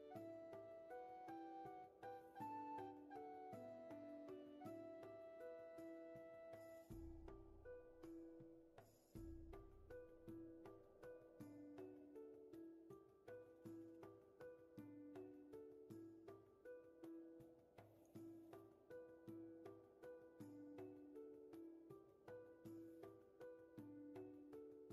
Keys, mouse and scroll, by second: 0.1 ctrl+shift+z, 1.0 ctrl+z, 2.2 ctrl+shift+z, 5.5-5.9 scroll up 1, 6.8 space, 7.9 shift+space, 9.6 shift+space, 10.3 ctrl+z, 11.3 ctrl+shift+z, 11.5 shift+space, 12.4 scroll up 1, 18.4-19.3 scroll up 1.